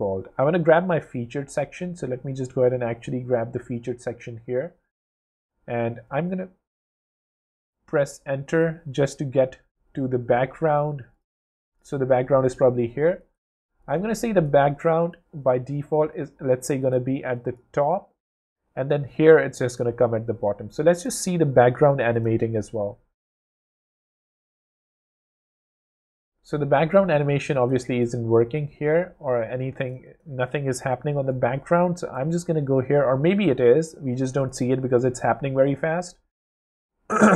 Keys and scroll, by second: 13.9 shift+space, 19.8 w.